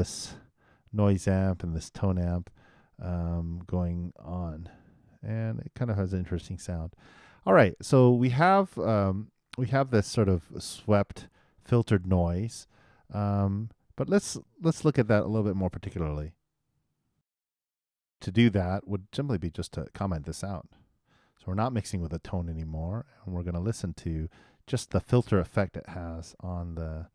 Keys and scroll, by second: 17.2 alt+i, 26.9 super+Return.